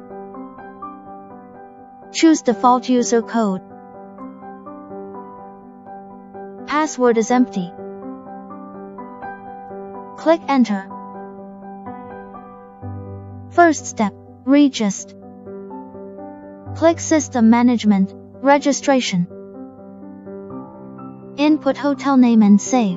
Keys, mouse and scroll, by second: 0.2 click, 3.8 click, 5.3 click, 13.5 click, 17.4 click.